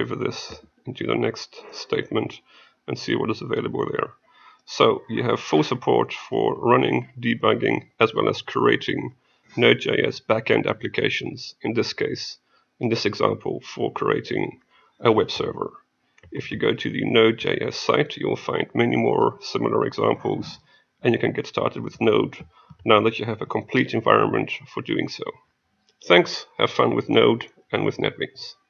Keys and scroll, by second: 0.5 F8, 23.4 F8.